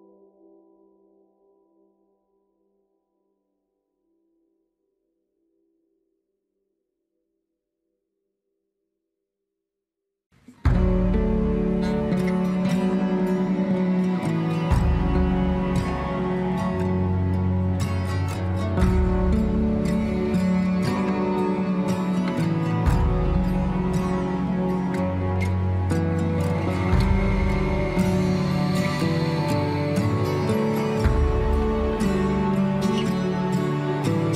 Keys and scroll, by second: 20.4 alt+w.